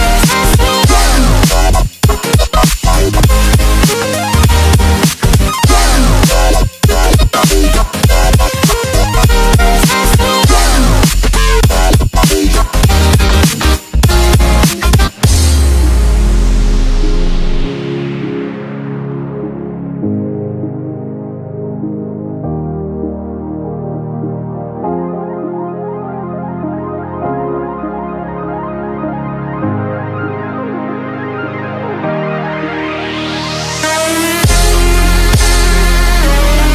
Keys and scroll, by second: 3.1 v, 7.1 1, 13.9 1, 16.9 alt+space, 17.8 alt+space, 22.9 1, 27.7 |, 33.2 1, 36.2 q.